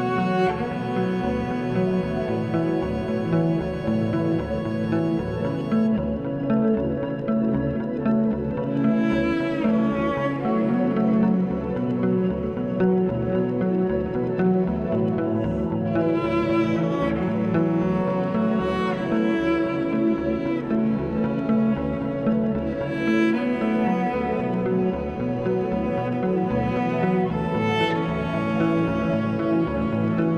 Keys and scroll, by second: 2.8 2, 8.5 s, 11.3 4, 11.6 s, 27.4 s.